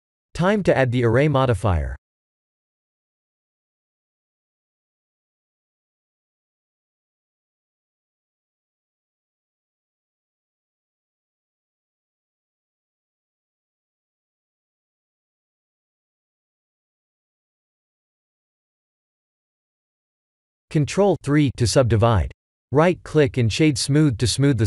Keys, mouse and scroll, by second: 0.3 click, 1.4 click, 4.7 click, 13.0 middle click, 14.1 middle click, 17.4 middle click, 19.0 click, 21.1-22.1 scroll down 9, 22.5-24.5 scroll up 6.